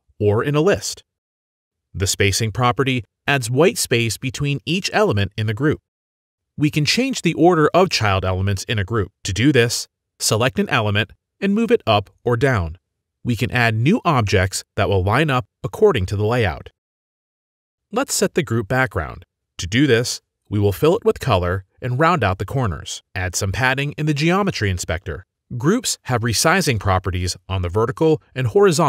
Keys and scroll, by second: 13.8 ctrl+d, 14.9 ctrl+d, 15.3 ctrl+z, 15.7 ctrl+z, 16.1 ctrl+z.